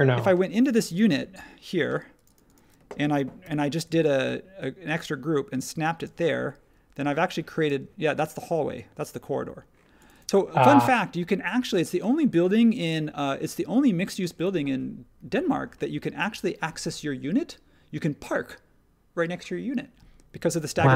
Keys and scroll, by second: 3.4 p, 6.0 space, 7.6 space.